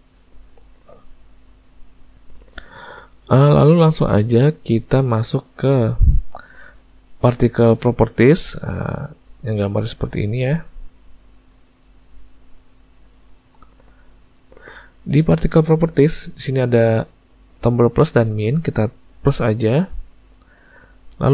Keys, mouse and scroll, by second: 2.2 middle click, 3.6 ctrl+middle click, 5.7 middle click, 14.4 click, 19.7 click.